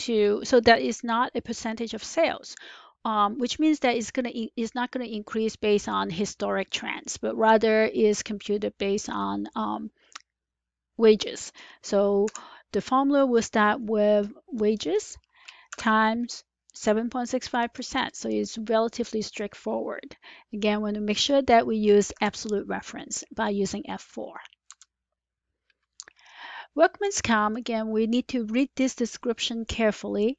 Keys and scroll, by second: 12.1 =, 15.6 *, 22.0 F4, 24.6 Return.